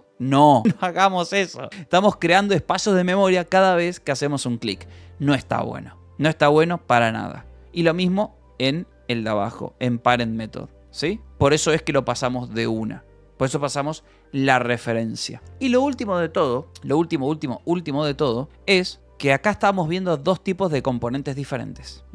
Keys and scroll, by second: 5.4 Escape, 6.0 u, 7.0 j, 7.5 j, 9.9-11.8 typing, 12.1 ctrl+s, 17.3 j, 17.9 k, 18.5 k.